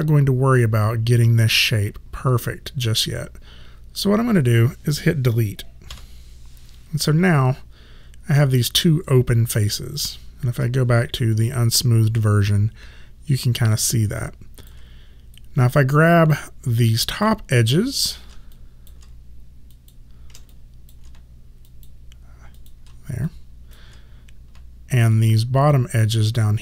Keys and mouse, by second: 6.0 Delete, 7.4 alt+click, 10.6 1, 11.5 alt+click, 15.5 right click, 17.2 click, 18.6 alt+click, 19.8 shift+click, 20.6 alt+click, 21.8 shift+click, 23.3 alt+click, 25.2 shift+click.